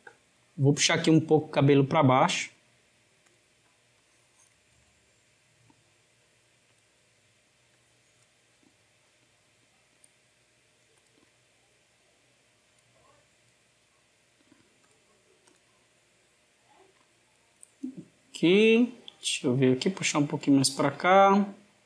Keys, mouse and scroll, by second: 0.6 click, 2.2 g, 3.7 click, 7.6 click, 8.4 g, 10.8 click, 13.1 click, 13.3 click, 13.7 g, 15.3 click, 18.8 click, 19.1 g, 20.7 click.